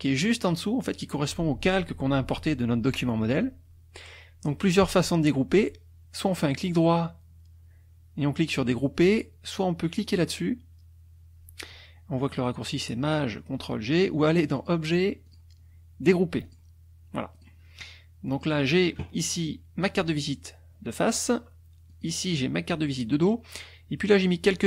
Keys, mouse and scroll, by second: 6.3 right click, 14.6 click, 15.3 click, 16.4 click, 17.3 click, 18.3 click, 21.9 click.